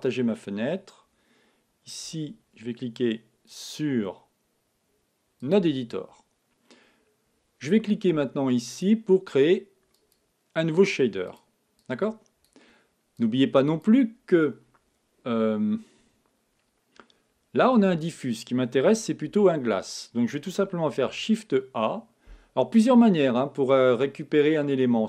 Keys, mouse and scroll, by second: 2.0 t, 3.5-5.3 drag, 8.7-15.1 drag, 19.2 x.